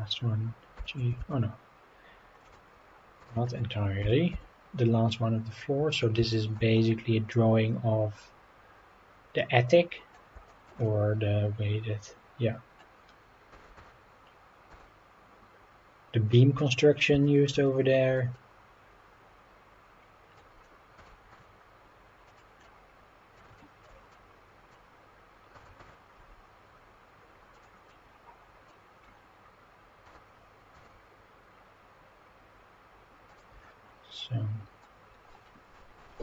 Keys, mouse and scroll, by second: 0.7 g, 1.2 shift+z, 2.4-2.8 drag, 2.8-3.2 scroll up 3, 3.3 shift+middle drag, 4.0 g, 4.3 z, 5.9 drag, 6.3 shift+middle drag, 6.7-10.1 middle drag, 10.5 shift+middle drag, 10.8-12.8 middle drag, 13.5 g, 13.7 y, 14.7 x, 16.7-17.1 drag, 17.2 shift+middle click, 17.6-18.2 middle drag, 18.3-20.4 middle drag, 21.0 g, 21.3 z, 22.3-22.6 drag, 22.6-23.3 middle drag, 23.6 shift+middle drag, 24.1-24.7 middle drag, 25.5 g, 25.8 y, 27.5-27.9 drag, 27.9-28.7 middle drag, 28.9-29.5 scroll up 4, 30.0 g, 30.7 x, 33.3 click, 33.6-34.1 scroll down 3, 34.2-34.8 middle drag, 35.2-35.6 scroll up 3, 36.1-36.2 middle drag.